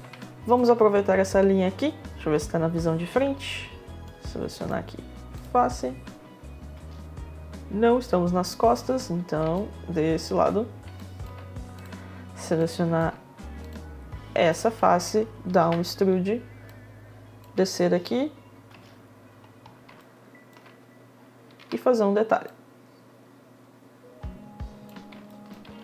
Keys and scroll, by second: 1.8 space, 6.3 space, 8.6 space, 16.7 e, 17.4 space, 18.3 space, 21.2 r.